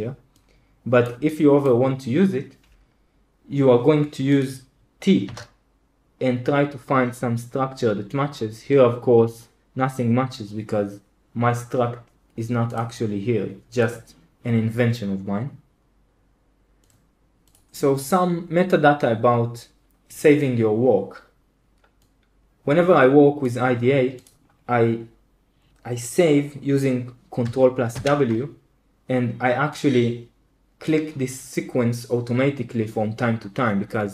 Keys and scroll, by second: 5.2 t, 27.9 ctrl+w.